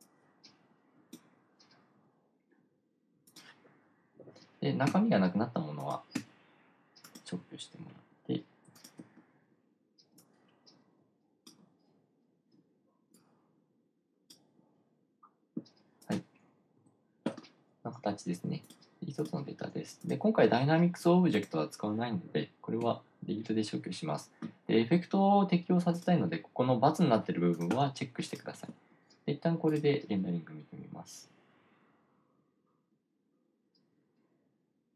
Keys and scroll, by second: 5.3 BackSpace, 6.7 BackSpace, 17.3 BackSpace, 23.3 BackSpace.